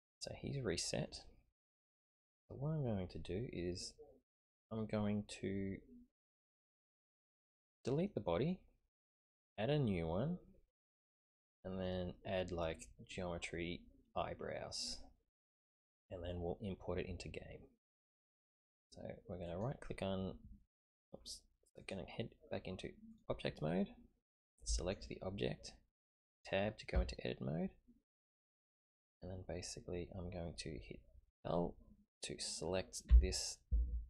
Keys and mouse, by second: 1.6-7.4 middle drag, 11.1-11.9 middle drag, 15.3 middle click, 19.5 click, 21.8-23.2 drag, 22.5 typing, 24.8 click, 26.9 Tab, 33.1 l.